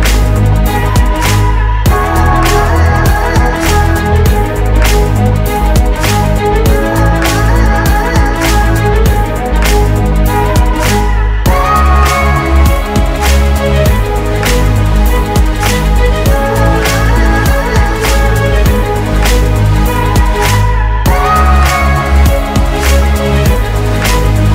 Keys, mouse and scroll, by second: 11.4 ctrl+d.